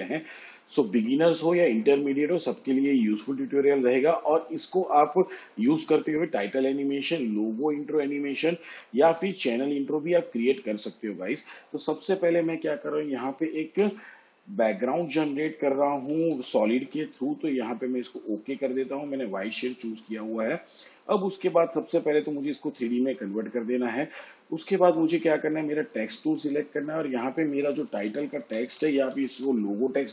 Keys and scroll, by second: 13.6 ctrl+y, 15.7-16.6 typing, 27.5-29.5 typing.